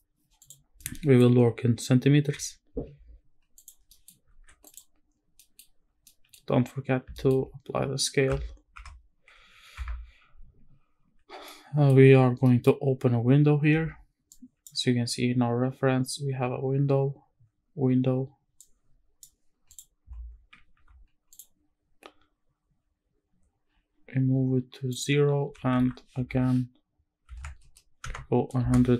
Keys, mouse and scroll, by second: 0.4 click, 0.8-1.2 middle drag, 2.3 n, 3.6 click, 3.9 middle drag, 4.3 ctrl+a, 5.4 middle click, 6.0-6.4 middle drag, 7.1 shift+middle click, 8.3 Tab, 8.7 Tab, 9.7 Tab, 11.4 middle click, 12.4 middle click, 19.7 click, 20.7 ctrl+r, 24.9 click, 25.4 g, 25.7 x, 26.1 y, 27.2 KP_1, 27.6 KP_0, 28.0 KP_Subtract, 28.6 KP_Enter.